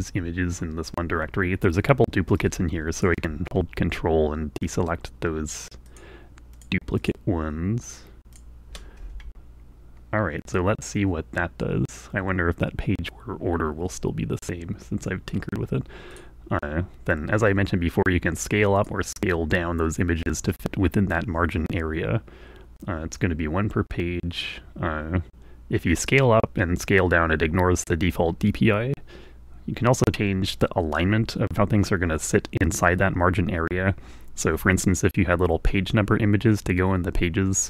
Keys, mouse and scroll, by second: 0.2 shift+click, 3.4-4.7 ctrl+drag, 5.0 ctrl+click, 6.4 ctrl+click, 7.0 ctrl+click, 7.4 ctrl+click, 8.3 ctrl+click, 8.6 ctrl+click, 16.5 click, 18.9-37.6 drag.